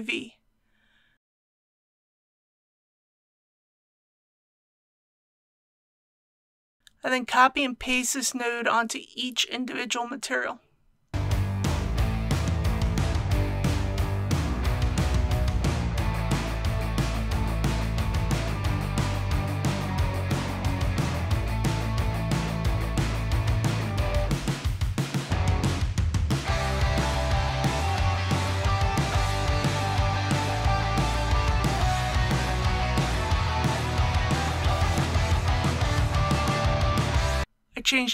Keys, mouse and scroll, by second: 9.1 click, 15.0 scroll down 1, 16.5 click, 20.5 ctrl+v, 22.8 click, 24.7 click, 26.4-26.9 scroll down 1, 27.9 click, 30.0 click, 31.8-32.1 scroll down 1, 33.0 click, 36.8 click, 37.7 click.